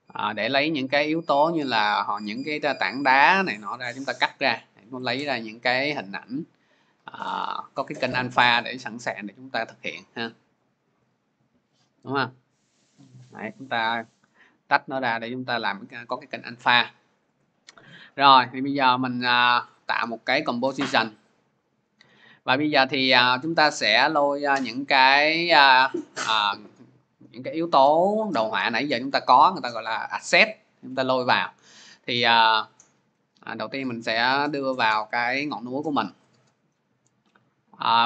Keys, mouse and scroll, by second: 5.0 click, 5.2 click, 5.9-7.2 scroll, 7.2 click, 8.0 click, 11.0 click, 11.2 click, 12.6 click, 13.6 click, 14.1 click, 15.8 click, 18.3 click, 20.0 click, 22.3 click, 25.3 click, 31.3 click, 32.4 click, 33.9 click.